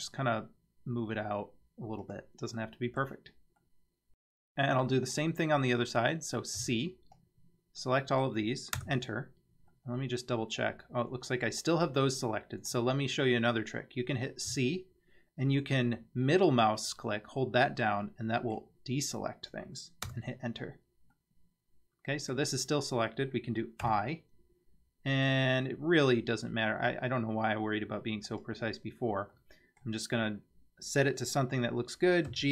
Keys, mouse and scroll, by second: 2.6 middle click, 3.6 middle click, 4.9-5.3 middle drag, 6.6 c, 9.7-12.7 middle drag, 14.5 c, 21.2-22.3 middle drag, 23.8 i, 29.4-29.8 middle drag, 32.3 g.